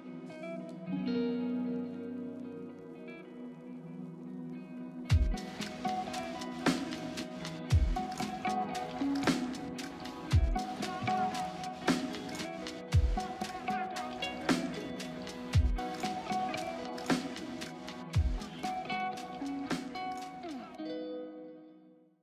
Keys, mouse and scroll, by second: 5.1 double click, 10.2 double click, 12.7 ctrl+d, 13.7 c, 14.8 double click, 15.8 c, 16.7 double click, 21.0 right click.